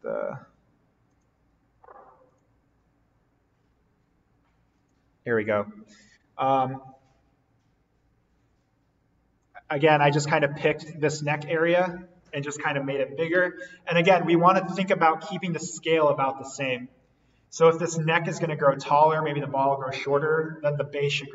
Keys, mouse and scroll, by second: 2.2 click, 4.7-10.0 drag, 14.8 click.